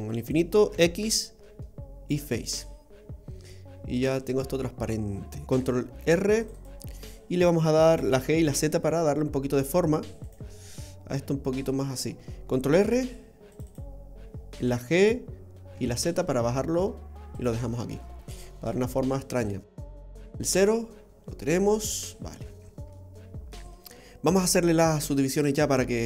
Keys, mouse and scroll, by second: 0.7 x, 2.6 middle click, 3.3 middle click, 5.4 middle click, 5.5 ctrl+t, 6.0 ctrl+r, 7.9 g, 10.6 middle click, 12.8 ctrl+r, 14.6 g, 17.7 scroll down 2, 17.9 middle click, 20.0 KP_0, 21.9-22.3 scroll up 2, 22.3 scroll down 1, 22.6 scroll down 3, 23.0 middle click, 24.9 shift+middle click.